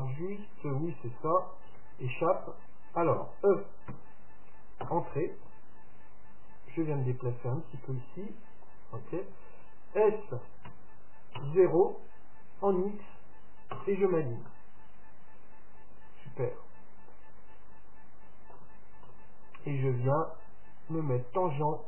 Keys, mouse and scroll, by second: 3.9 e, 6.7-8.4 drag, 10.7 s, 14.5-16.4 middle drag, 19.1 KP_7, 20.4-21.8 drag.